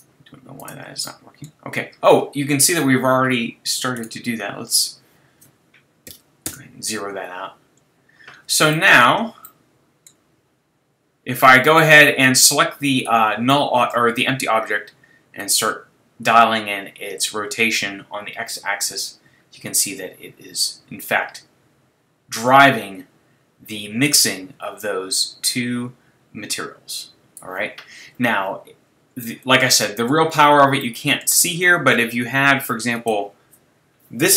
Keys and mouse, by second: 0.6-2.4 drag, 4.0-6.3 right drag, 4.8-6.6 drag, 13.0-17.0 drag, 29.2-30.7 middle drag, 30.8 middle click, 31.0 middle click, 31.2 middle click.